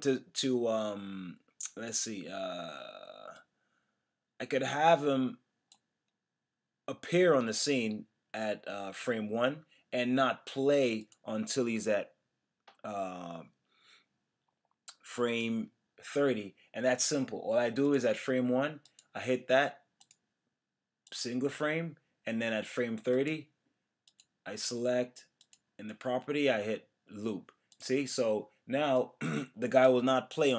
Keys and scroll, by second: 15.4 F6.